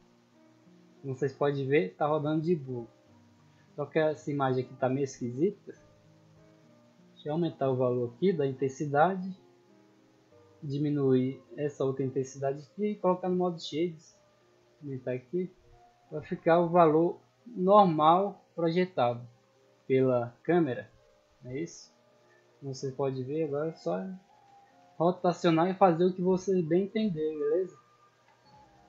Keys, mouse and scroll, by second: 1.1 d, 2.2 d, 2.7 d, 3.9-4.8 middle drag, 5.1-5.4 middle drag, 5.9 right click, 7.8 click, 8.9-9.3 scroll down 2, 9.3 scroll up 2, 10.6 click, 13.3 click, 14.0 click, 14.5-15.1 scroll up 2, 15.4-16.7 middle drag, 16.9-20.7 typing, 21.6 Escape, 21.7 middle drag, 22.4-23.0 middle drag, 23.4 middle click, 23.8-24.3 scroll up 2, 24.3 r, 24.6 x, 25.8 click, 26.2-26.7 middle drag, 27.0 shift+middle click, 28.0 right click, 28.6 shift+s.